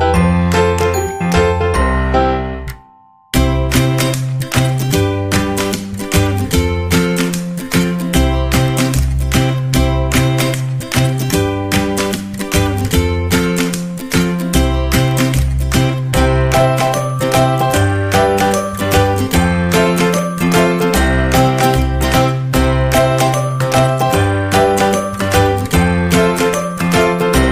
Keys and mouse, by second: 0.0 w, 1.3 KP_3, 1.9 g, 4.2-4.7 middle drag, 5.0 middle click, 5.4 shift+middle click, 6.3 alt+right click, 6.6 g, 8.1 KP_3, 9.1 shift+middle click, 9.7 g, 10.7 middle click, 12.0 middle click, 15.9 middle click, 16.9 shift+middle click, 17.4 middle click, 18.2 middle click, 19.0 shift+middle click, 19.8 middle click, 22.7 right click, 23.5 shift+right click, 24.6 shift+right click, 26.0 right click, 26.7 shift+right click, 27.0 middle click.